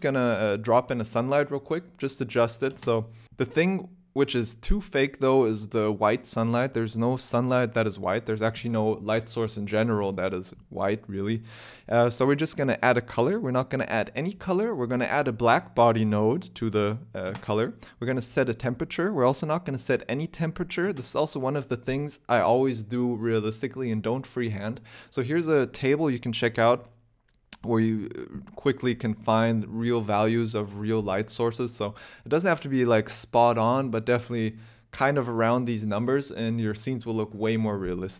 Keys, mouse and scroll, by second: 0.0 r, 0.9 middle click, 1.6 middle click, 13.5 click, 13.7 click, 14.6 click, 15.4 click, 17.6 click, 18.4 0, 18.5 0, 19.4 KP_0.